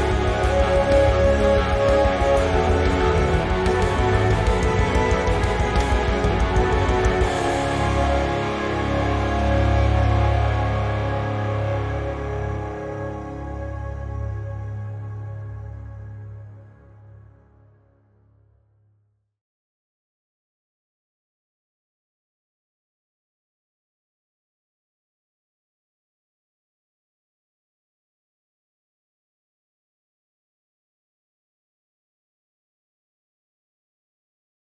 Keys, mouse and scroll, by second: 0.0 Tab, 0.2-0.8 scroll up 2, 0.8 click, 1.0 alt+shift+click, 1.3 scroll down 2, 1.5 shift+middle click, 1.9-2.5 scroll up 2, 2.5 alt+shift+click, 2.9-4.1 shift+middle drag, 4.1 alt+shift+click, 4.4-6.6 middle drag, 4.6 scroll down 2, 5.5 scroll up 2, 6.6 alt+shift+click, 7.0-9.7 middle drag, 8.0 g, 9.8 click, 10.0 Tab, 10.2 scroll down 1, 10.3-16.0 middle drag, 13.0 scroll down 1, 13.7 Tab, 13.9-14.5 scroll up 1, 14.5 Tab, 16.0 `, 16.3-16.6 scroll down 1, 16.6 click, 17.2 z, 17.6 click, 18.5 z, 18.7 middle click, 19.2-19.6 scroll up 1, 19.6-21.0 middle drag, 21.0 alt+s, 22.6 right click, 22.8-23.5 scroll down 2, 23.1 z, 23.5 c, 24.8 shift+right click, 24.9 scroll up 1, 25.7 alt+s, 27.8 right click, 28.3-28.9 scroll up 1, 28.9 alt+s, 30.7 shift+click, 30.8 Tab, 31.2-31.7 scroll down 1, 31.7-32.9 middle drag, 32.1 Tab, 32.3-32.6 scroll up 1, 32.9 click, 32.9-34.7 middle drag, 33.4 `, 33.9 scroll down 1, 34.2 click.